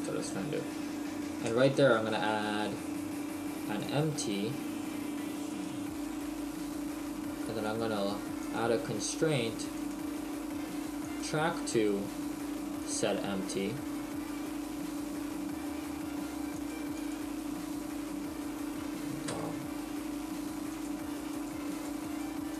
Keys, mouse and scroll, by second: 0.6 right click, 1.5 space, 5.5 right click, 7.7 click, 11.1 click, 16.6 click, 19.3 KP_0, 20.7 click, 21.4 click, 21.8 click, 22.1 click.